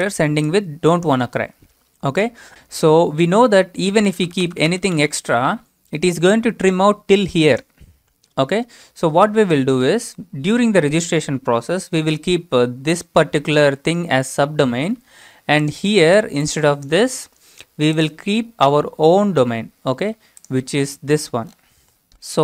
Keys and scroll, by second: 3.7-5.4 typing, 17.3 BackSpace, 22.0 ctrl+c, 22.2 alt+Tab.